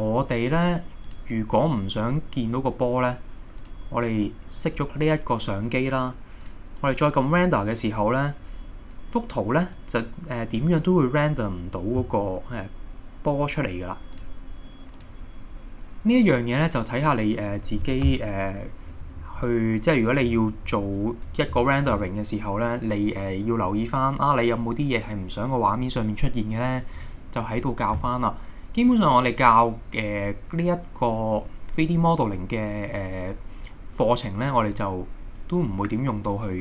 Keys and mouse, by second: 1.1 click, 3.6 click, 6.5 click, 16.2 click, 18.1 KP_0, 19.1-20.6 middle drag, 28.9-35.3 drag.